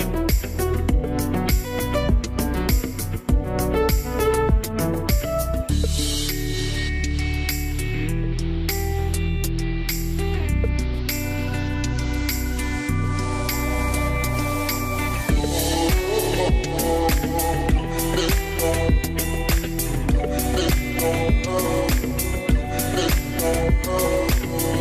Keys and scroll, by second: 0.1 4, 0.3 Return, 9.8 BackSpace, 10.4 6, 10.5 Return, 12.1 BackSpace, 12.4 8, 12.6 Return, 18.3 8, 18.4 Return.